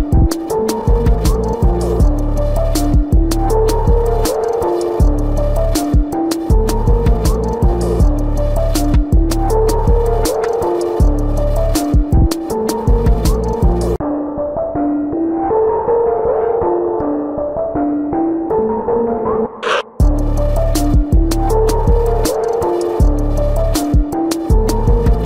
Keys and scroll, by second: 1.4 ctrl+-, 4.5 ctrl+-.